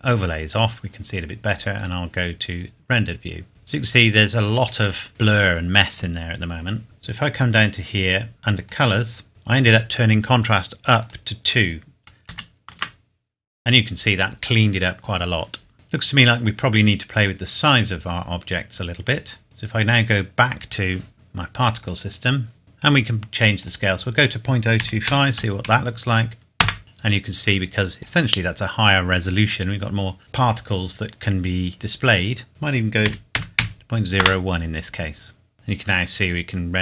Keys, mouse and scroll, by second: 1.7 click, 6.8 scroll down 1, 8.6 click, 9.1 scroll down 1, 9.3 click, 11.0 click, 12.3 KP_2, 12.7 KP_Enter, 16.2 scroll up 1, 18.7-19.0 scroll down 1, 21.8 click, 22.6 scroll up 1, 23.6 click, 24.8 KP_Decimal, 25.0 KP_0, 25.3 KP_2, 25.6 KP_5, 26.6 KP_Enter, 28.3 scroll up 1, 30.9-32.5 scroll up 1, 32.5 click, 33.0 KP_Decimal, 33.3 KP_0, 33.6 KP_1, 34.2 KP_Enter, 35.5-35.8 scroll down 1.